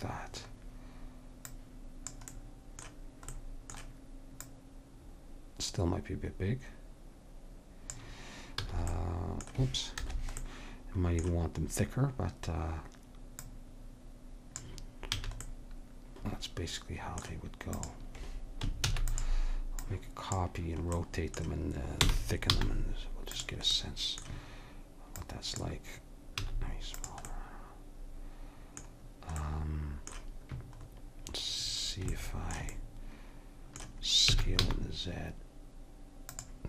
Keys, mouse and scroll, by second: 1.5-3.4 drag, 3.4 middle click, 4.4-6.2 drag, 8.7 s, 10.5 middle click, 13.4-15.2 drag, 15.2 a, 15.6-16.8 middle drag, 17.8-19.7 drag, 18.9 shift+d, 19.9-21.0 drag, 21.0 middle click, 22.0 r, 23.8-25.2 middle drag, 25.2-26.4 drag, 26.4 s, 27.0 click, 34.3 s.